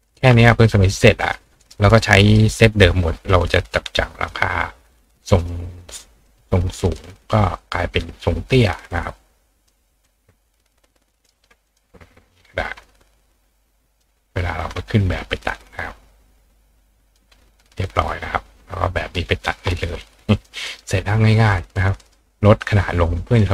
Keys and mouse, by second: 0.0-1.7 drag, 1.2 right click, 2.2 click, 3.3-4.3 drag, 5.4 click, 6.3 click, 7.6-9.7 drag, 10.0-11.2 ctrl+drag, 11.1 ctrl+right click, 11.3 ctrl+click, 11.8 click, 11.8-13.1 right drag, 12.7 ctrl+click, 13.2 ctrl+click, 13.2 ctrl+right click, 14.0 ctrl+click, 14.2-20.8 ctrl+right drag, 14.6-17.2 ctrl+drag, 17.9 click, 20.3 click, 22.0 right click.